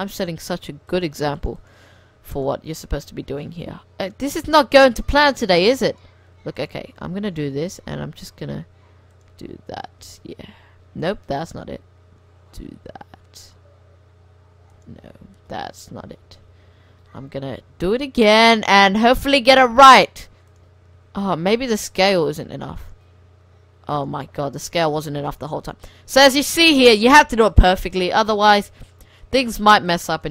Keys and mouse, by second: 0.9 click, 2.9-4.0 drag, 3.3 ctrl+z, 3.4 ctrl+z, 3.8 ctrl+z, 4.3 ctrl+z, 5.6 click, 7.7 click, 7.7 g, 8.2 click, 10.0 shift+s, 11.1 ctrl+z, 11.5 g, 15.1 ctrl+z, 15.6 ctrl+z, 15.9 ctrl+z, 16.4 ctrl+z, 16.5 ctrl+z, 16.9 ctrl+z, 17.7 g, 20.9 s, 22.3 g, 23.2 s, 24.3 g, 25.2 shift+s, 29.1 click.